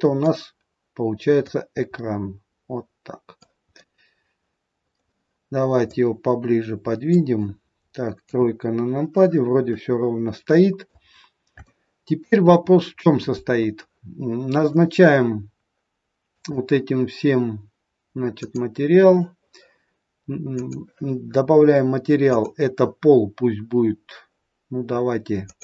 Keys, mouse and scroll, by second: 1.4 click, 3.7 middle click, 5.7 click, 8.2 KP_3, 9.6 middle click, 11.2-11.6 scroll up 3, 11.6 shift+middle click, 12.7-13.8 scroll up 1, 14.5 click, 16.2 click, 20.4 click, 22.2 click.